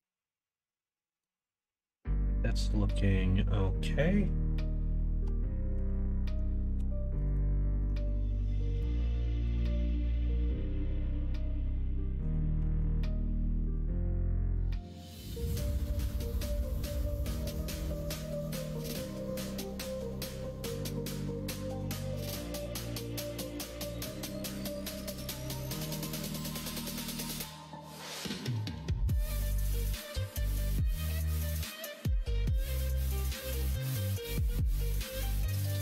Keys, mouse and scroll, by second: 2.4 middle click, 5.9 alt+z, 6.7 2, 7.2 alt+click, 9.4 s, 12.6 alt+z, 13.0 middle click, 13.6 right click, 13.8 alt+z, 14.5 middle click, 16.1 click, 16.9 3, 17.1 click, 17.7 middle click, 18.9 middle click, 20.7 middle click, 21.1 g, 23.7 middle click, 24.4 scroll down 1, 25.6 scroll up 2, 25.7 middle click, 25.8 scroll down 2, 26.5 click, 26.9 middle click, 27.9 middle click, 35.0 middle click, 35.6 middle click.